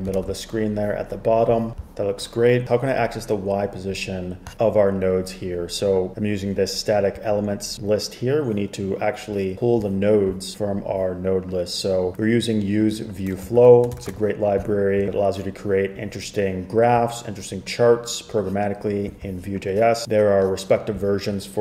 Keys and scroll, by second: 0.3 super+r, 13.7 shift+super+[, 14.1 shift+super+[.